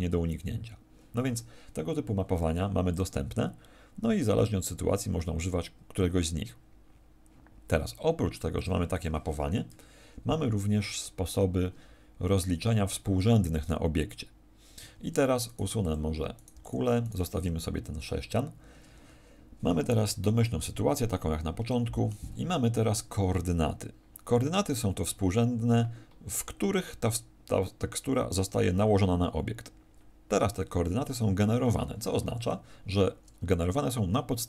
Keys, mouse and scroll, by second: 14.7 Escape, 15.4 right click, 15.7 x, 16.3 right click, 16.4 x, 17.0 right click, 32.4 Escape, 33.2-33.7 scroll up 1, 34.3 scroll up 1.